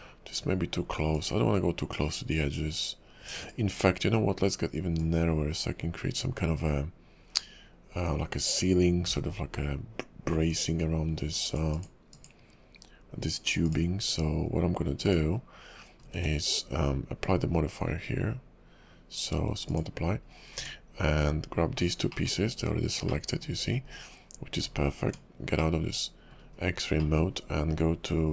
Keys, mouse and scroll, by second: 1.1 click, 4.9 click, 13.6 click, 14.3 scroll up 2, 15.0 click, 16.0 scroll down 3, 16.2 q, 20.0-20.5 scroll up 4, 20.5 Tab, 21.8 scroll down 2, 22.1 middle click, 22.6 KP_5, 23.0 middle click, 23.5 scroll up 1, 23.8 KP_5, 24.6 Tab, 25.6 middle click, 26.5 KP_5, 27.0 middle click.